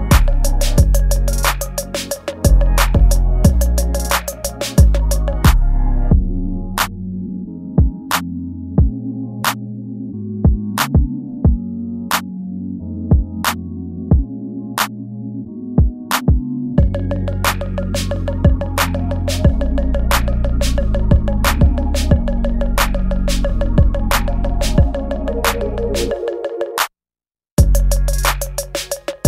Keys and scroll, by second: 0.1 space, 1.3 space, 11.3 ctrl+g, 12.9 space, 13.5 ctrl+z, 14.9 space, 15.5 ctrl+z, 17.1 space, 23.5 space, 25.9 space, 26.8 space, 29.1 space.